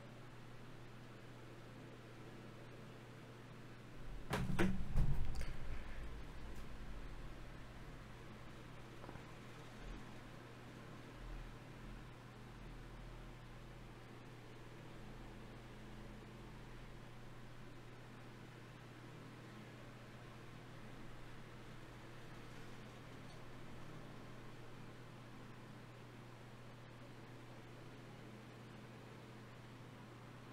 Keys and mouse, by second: 13.7 middle click, 16.2-18.1 drag, 19.1 Tab, 20.4 KP_Divide, 23.5-26.9 drag, 26.9 KP_Divide, 29.4 Tab, 30.3 Tab.